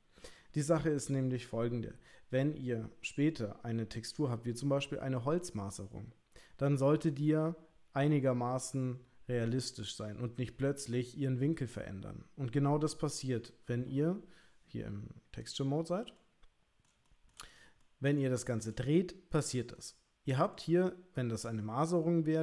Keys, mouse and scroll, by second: 15.5 click, 16.2 middle click, 17.1 shift+middle click, 17.5 click, 17.8 middle click, 18.3 shift+middle click, 19.8 middle click.